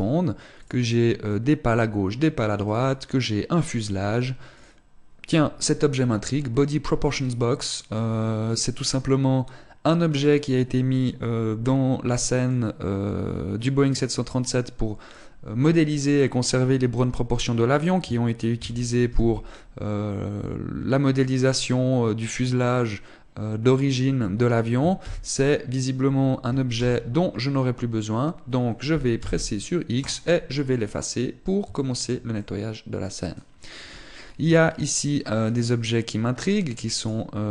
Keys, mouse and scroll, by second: 19.4 KP_5, 27.0 KP_7, 29.5 x.